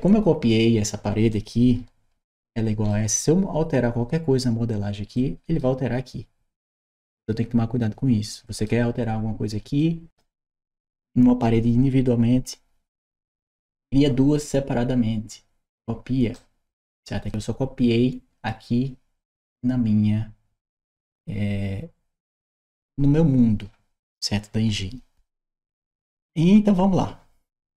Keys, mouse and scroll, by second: 0.3 click, 1.1-2.7 right drag, 2.7 d, 5.0 right click, 5.4 s, 8.1 right click, 9.6 right click, 16.2 right click, 17.1 click.